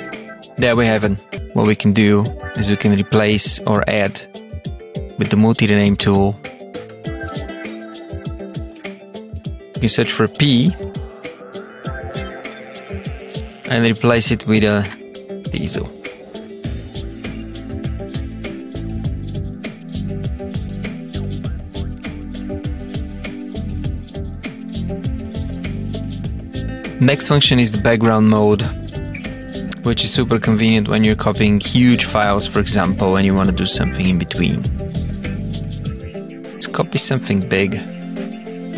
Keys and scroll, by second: 0.5 Up.